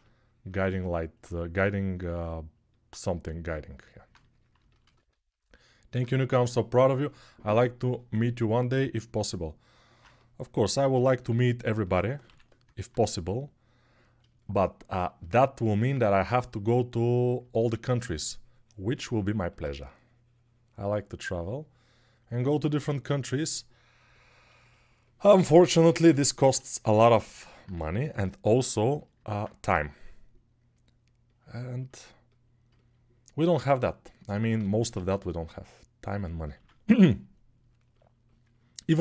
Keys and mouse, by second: 1.3 g, 12.1 6, 15.7 3, 26.3 1, 29.5 g, 34.7 shift+r, 36.5 ctrl+r.